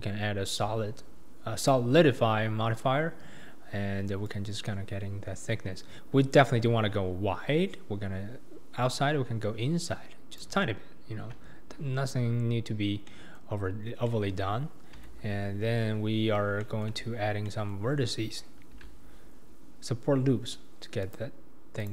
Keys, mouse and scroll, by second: 4.2-7.4 drag, 12.8 scroll down 2, 13.1-15.0 middle drag, 15.0 Tab, 15.6-16.6 scroll up 2, 16.6 shift+middle click, 17.0-17.4 scroll down 2, 17.4-18.7 middle drag, 18.7 ctrl+r.